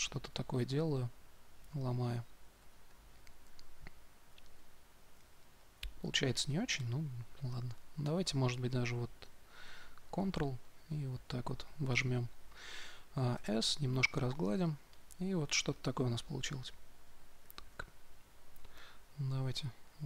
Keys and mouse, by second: 0.6-7.8 drag, 8.0 2, 10.1-11.8 drag, 13.3 s, 13.6-16.8 drag, 17.6-20.0 drag.